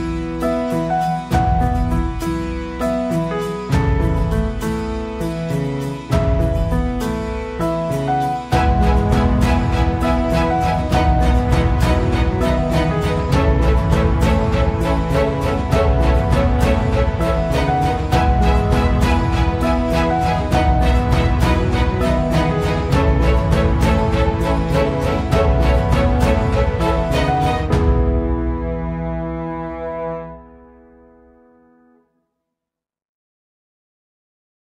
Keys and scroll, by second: 5.1 Escape, 7.4 Escape, 9.4 Escape, 14.8 Escape, 18.4 Escape, 18.6 Escape, 27.5 space, 30.0 Escape.